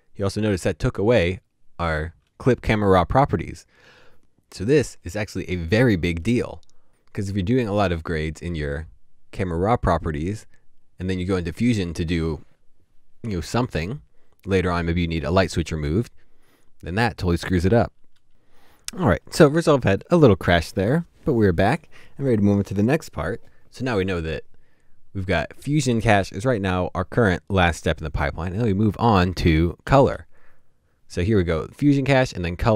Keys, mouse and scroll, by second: 17.9 typing, 29.4 double click.